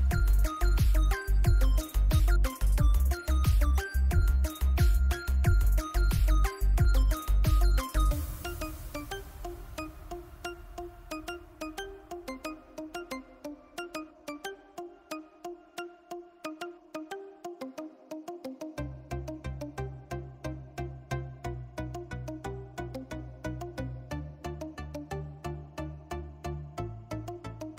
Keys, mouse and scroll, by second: 0.8 click, 4.6-10.0 drag, 10.0 ctrl+0, 12.6 ctrl+0, 13.3 ctrl+click, 14.4 ctrl+g, 17.2 ctrl+alt+g, 17.7-19.2 alt+drag, 19.7-21.8 drag, 21.8-23.9 typing, 26.9-27.7 drag.